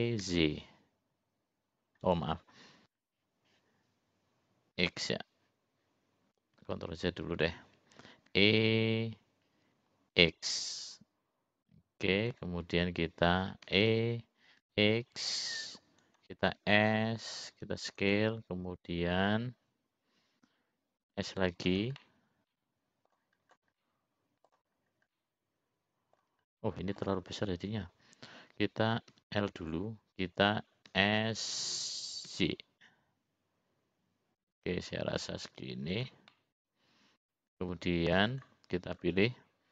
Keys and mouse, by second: 5.8 x, 7.9 ctrl+z, 10.1 ctrl+z, 10.1 e, 14.9 e, 16.7-17.9 drag, 17.6 s, 22.2 s, 23.1-24.3 middle drag, 25.1 middle click, 26.4-27.5 middle drag, 27.9 middle click, 30.6 l, 32.2 s, 37.7-39.0 middle drag.